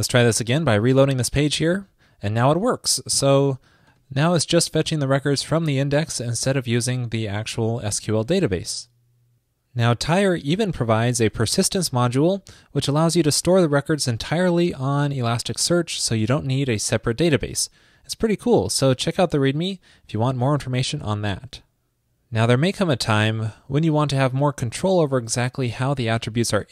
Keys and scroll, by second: 1.0 super+r.